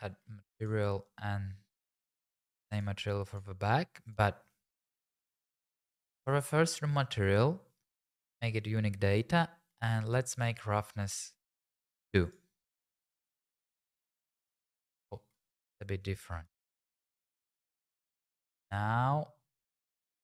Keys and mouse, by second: 0.6 click, 4.1 click, 9.7 middle click, 10.3-11.5 drag, 12.2 click, 12.8 click, 13.1 click, 16.5 shift+click, 17.4 middle click.